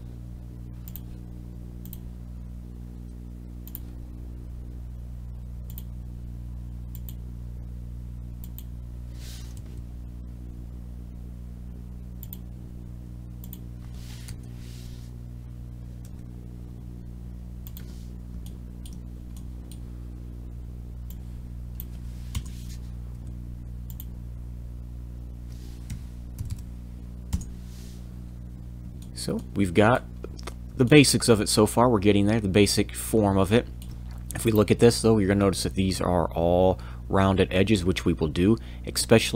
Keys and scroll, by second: 9.6 l, 16.0 e, 22.3 Return, 23.1 f, 25.9 5, 26.3 m, 27.3 Return.